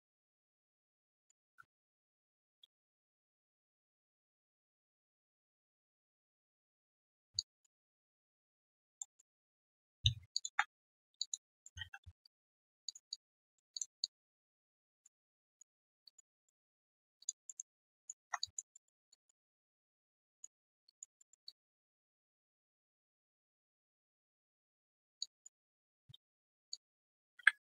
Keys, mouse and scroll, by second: 0.6 right click, 1.4 right click, 2.6 w, 2.6 ctrl+shift+q, 7.3 alt+click, 9.0 alt+middle click, 9.3 alt+click, 9.6 alt+middle click, 10.3 ctrl+shift+click, 11.1 alt+click, 11.5 alt+middle click, 11.6 alt+scroll down 1, 11.7 3, 12.2 right click, 12.6 q, 13.1 alt+click, 13.7 alt+click, 14.6 alt+right click, 14.9 alt+middle click, 15.2 alt+click, 15.8 alt+middle click, 16.0 alt+click, 16.3 alt+middle click, 16.5 alt+right click, 16.7 alt+click, 17.4 alt+middle click, 17.7 alt+right click, 18.2 1, 18.4 alt+click, 18.7 alt+middle click, 19.1 alt+click, 20.6 alt+middle click, 20.8 alt+click, 21.1 alt+middle click, 21.4 alt+click, 22.0 alt+right click, 22.2 alt+click, 23.7 right click, 25.0 right click, 25.2 alt+click, 25.6 alt+middle click, 26.7 ctrl+shift+click.